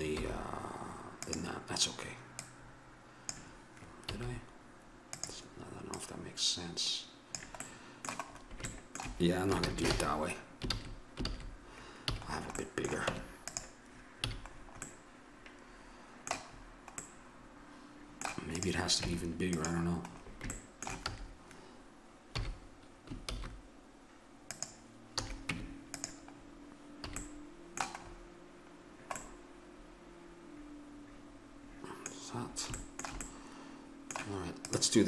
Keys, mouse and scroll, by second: 0.2 s, 2.4-4.3 drag, 4.1 s, 5.9-7.6 drag, 7.6 middle click, 8.7 middle click, 9.6 ctrl+z, 9.9 ctrl+z, 10.7 ctrl+z, 11.3 ctrl+z, 12.0 a, 13.1 Tab, 14.3 a, 16.6-18.1 middle drag, 18.5 right click, 19.0 Tab, 20.1-21.2 middle drag, 21.0 a, 22.3 s, 25.1 a, 25.5 Tab, 26.3-28.6 drag, 27.1 a, 29.3-31.2 middle drag, 31.9-34.7 middle drag, 34.7-35.0 drag.